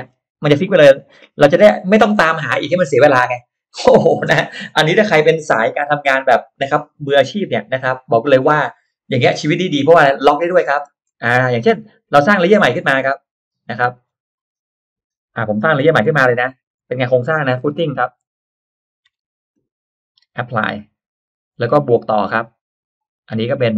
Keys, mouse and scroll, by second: 0.0 scroll down 2, 10.5-10.9 scroll down 1, 10.9 middle click, 11.1 click, 11.5-11.8 scroll up 1, 12.6 click, 13.9 click, 15.9 Caps_Lock, 16.3-19.7 typing, 20.5 click, 22.3 click, 23.5 click.